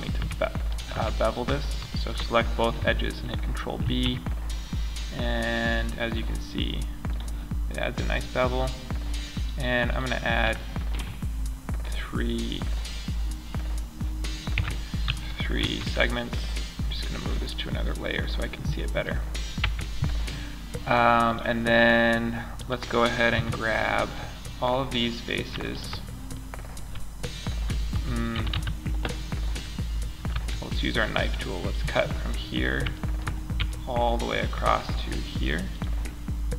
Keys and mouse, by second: 3.2 ctrl+b, 9.4 middle click, 9.9 middle drag, 10.7-11.8 middle drag, 13.9 Tab, 15.0 m, 19.0 Tab, 22.7 KP_Decimal, 25.0-25.7 middle drag, 27.3 a, 27.7 a, 27.9 a, 29.6 k.